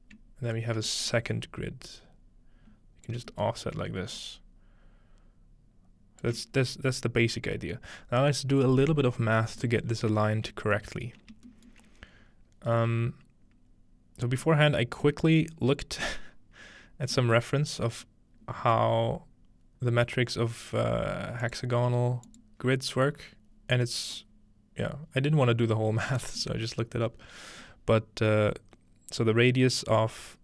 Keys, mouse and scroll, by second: 1.0-7.8 shift+drag, 3.4-6.3 shift+middle drag, 7.6-9.2 middle drag, 9.2-10.0 scroll down 1, 10.0 scroll up 3, 10.8-14.4 shift+middle drag, 14.8-15.4 shift+middle drag, 15.4-17.1 scroll down 1, 17.4-17.8 middle drag, 18.1 middle click, 21.4-22.4 drag.